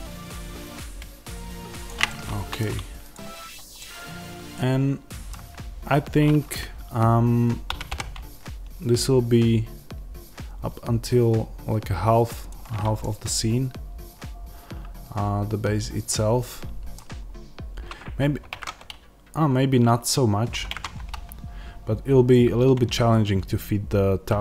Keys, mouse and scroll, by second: 2.0-3.0 middle drag, 3.0 click, 3.7-7.7 middle drag, 7.7 g, 12.4 ctrl+click, 12.9 middle click, 17.1-18.4 scroll up 1, 20.6-24.4 scroll up 1.